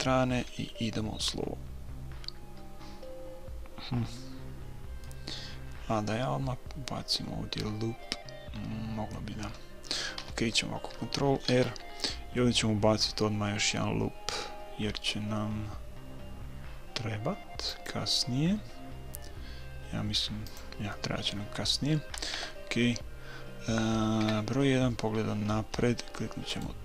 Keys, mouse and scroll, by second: 5.0-6.9 middle drag, 10.2 a, 11.5 ctrl+r, 21.0-22.8 middle drag, 22.3 KP_3, 24.2 KP_1, 25.2-26.5 middle drag, 26.5-26.8 right drag.